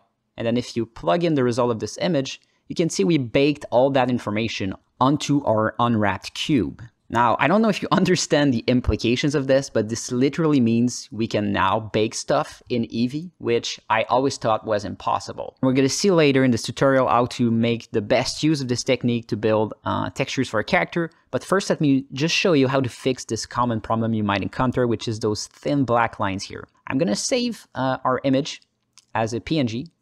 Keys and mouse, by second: 0.8 click, 2.0-3.0 alt+middle drag, 5.0 alt+shift+middle click, 5.3 ctrl+alt+middle click, 5.7 ctrl+space, 6.1 ctrl+alt+middle click, 6.6 alt+shift+middle click, 7.4 ctrl+space, 7.9-9.3 alt+middle drag, 9.9 alt+shift+middle click, 10.1-12.4 alt+middle drag, 12.9 ctrl+space, 13.3 ctrl+middle click, 16.9 alt+middle click, 19.4 alt+shift+middle click, 19.9 ctrl+alt+middle click, 20.5-21.6 alt+middle drag, 21.7 shift+middle click, 22.0 ctrl+alt+middle click, 22.7 alt+shift+middle click, 23.2 ctrl+alt+middle click, 26.4-27.3 drag.